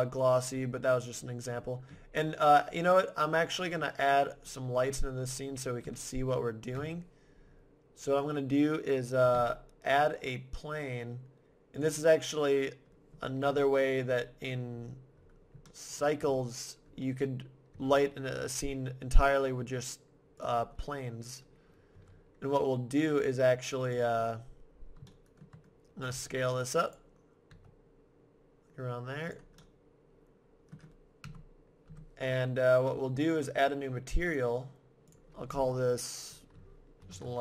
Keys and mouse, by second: 0.1-1.9 drag, 1.9-4.0 middle drag, 4.0 middle click, 5.8 KP_1, 6.5 middle click, 6.7 KP_7, 9.4 shift+a, 13.5 KP_1, 14.7-16.6 middle drag, 17.7-18.9 middle drag, 17.7 r, 20.4-22.3 drag, 21.9 g, 23.9-25.4 drag, 26.1 s, 26.3 middle click, 27.0-28.7 drag, 27.5 s, 29.3-31.0 drag, 31.3 KP_0, 31.9 KP_0.